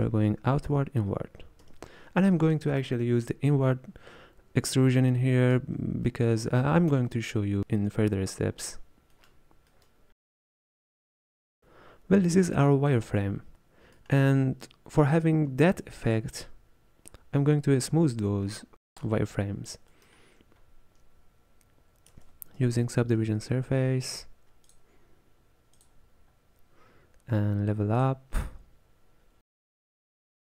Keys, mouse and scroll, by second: 0.0-1.7 typing, 5.2-10.9 shift+middle drag, 10.9-12.5 drag, 12.5-12.9 scroll down 2, 12.9-16.5 middle drag, 19.0 click, 24.8 space, 28.1-30.5 drag.